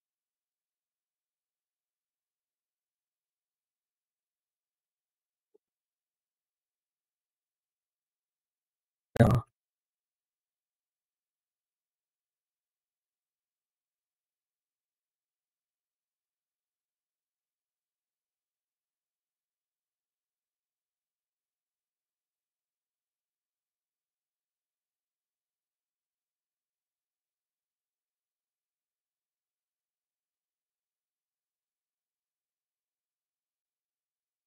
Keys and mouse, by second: 0.4-3.4 middle drag, 4.2-5.2 drag, 7.6 click, 9.2 z, 10.6 z, 12.5-16.4 drag, 18.5-22.1 drag, 24.7-30.1 drag, 31.6 Home, 33.7-34.4 drag.